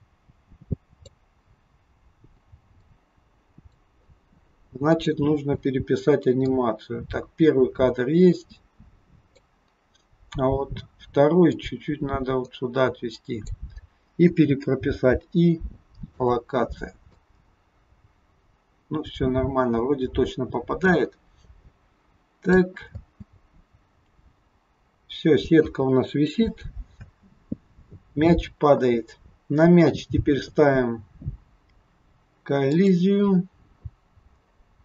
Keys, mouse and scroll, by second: 1.7-2.4 scroll down 2, 2.9 click, 4.9 click, 11.5 click, 17.2 click, 23.0 space, 27.1 space, 29.2 scroll up 1, 32.6 click, 34.3-34.6 scroll down 5.